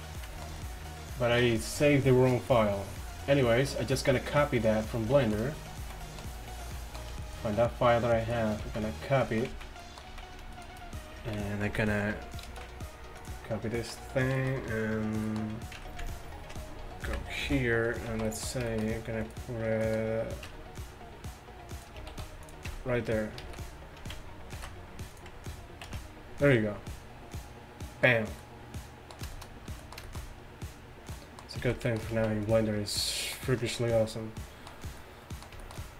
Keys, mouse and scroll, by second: 13.8 middle click, 17.1 KP_1, 17.5 z, 18.1 z, 20.5 Tab, 22.2 shift+s, 22.7 Tab, 23.5 shift+a, 24.6 ctrl+b, 25.9 ctrl+v, 29.5-30.7 middle drag, 31.7 z, 32.2 z.